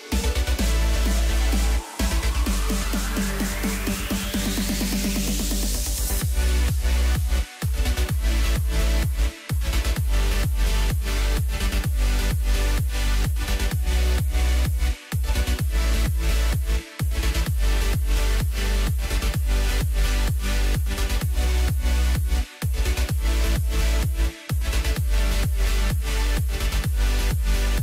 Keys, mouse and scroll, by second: 0.4 ctrl+a, 2.1-2.6 scroll down 2, 2.8-3.4 middle drag, 3.4-3.8 scroll up 1, 3.8 Tab, 4.1 middle click, 4.6-6.4 scroll up 1, 6.4 click, 6.9 click, 7.1 click, 8.0 ctrl+b, 12.8-14.6 drag, 14.6 Tab, 15.2-17.0 right drag, 17.0 KP_3, 17.7-18.2 scroll up 1, 18.2 s, 22.2-22.6 scroll down 3, 22.6-23.4 middle drag, 23.4-24.8 right drag, 24.8 scroll down 1, 25.0 middle click, 25.7-26.6 scroll up 2, 26.6 click.